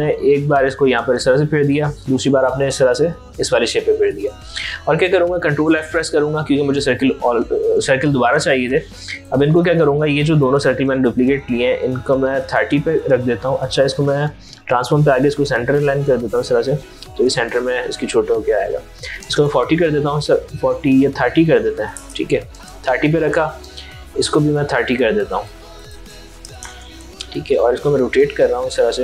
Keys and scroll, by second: 5.4 ctrl+f, 9.9 ctrl+z, 11.6 ctrl+a, 13.2 ctrl+z, 16.8 ctrl+a, 21.2 ctrl+a, 25.8 ctrl+a.